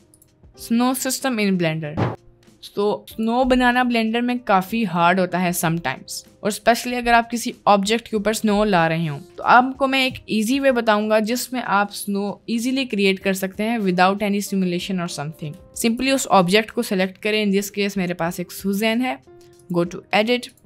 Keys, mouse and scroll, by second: 2.3 middle click, 3.1 middle click, 4.9-5.3 middle drag, 5.8-6.6 middle drag, 15.9 click, 17.5 middle click.